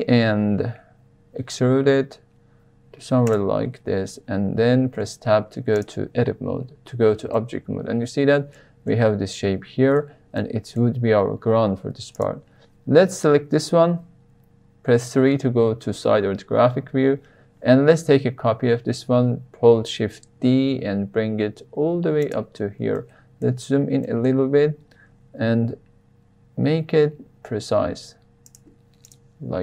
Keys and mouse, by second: 3.2 click, 4.9 Tab, 5.7 click, 7.3-8.5 middle drag, 8.9-9.9 middle drag, 10.3-10.7 middle drag, 12.1 click, 14.9 KP_3, 19.9 shift+d, 22.2 drag, 22.9-23.4 shift+middle drag, 24.0 shift+middle drag, 25.5 g, 28.4 click.